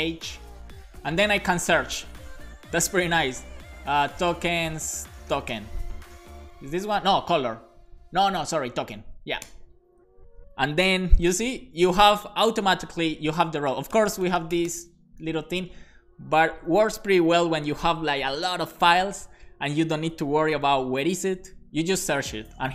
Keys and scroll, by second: 4.0-6.0 typing, 9.4 Return, 11.2 super+b, 14.1 BackSpace, 15.2 super+s.